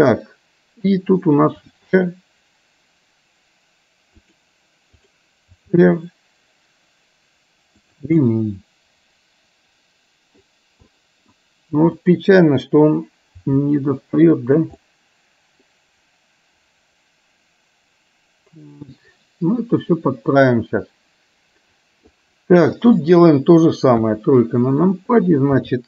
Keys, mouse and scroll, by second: 2.3 r, 8.2-10.5 middle drag, 11.0 middle click, 13.9 r, 14.9-22.2 middle drag, 23.2 click, 24.2 KP_1, 25.7 r.